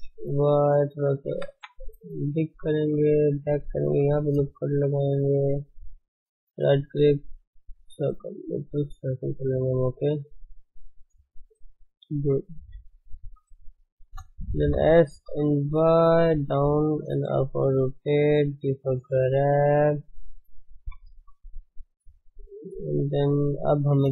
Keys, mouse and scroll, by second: 1.4 g, 2.5 shift+z, 2.8-4.0 shift+middle drag, 4.0 ctrl+r, 5.1 shift+z, 7.8 right click, 8.2-12.6 middle drag, 8.8 shift+z, 12.2 KP_1, 12.6 KP_3, 12.7 middle click, 14.0 shift+z, 14.6 s, 17.3 r, 18.6 g, 19.9 shift+z, 20.8 KP_1, 23.5 Tab.